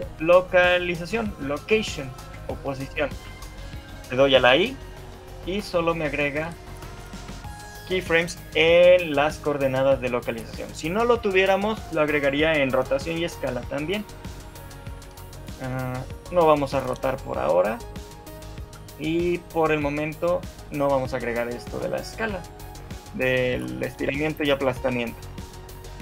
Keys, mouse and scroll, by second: 3.2 shift+middle click, 4.6 i, 14.8 shift+middle click, 16.0 click, 17.8 shift+middle click, 19.7 click, 20.8 click, 21.6 shift+middle click, 22.4 KP_1, 23.4 scroll up 1, 23.6 shift+middle click, 24.5 shift+middle click.